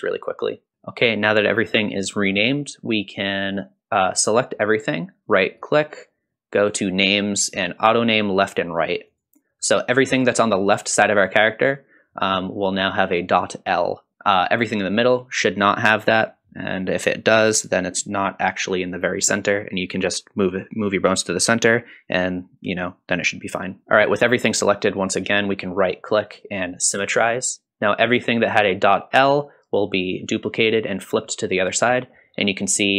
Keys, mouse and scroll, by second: 0.0 click, 0.2 F2, 0.4 o, 0.7 a, 5.6-9.3 right drag, 25.3-27.6 right drag, 32.1-32.9 scroll up 2.